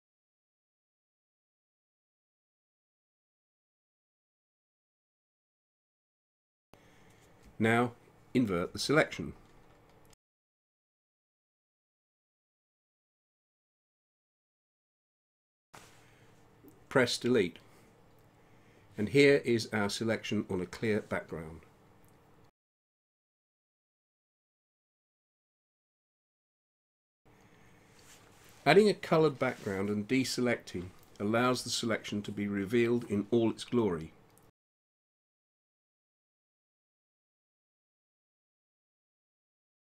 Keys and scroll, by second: 0.5 Return, 17.1 Delete.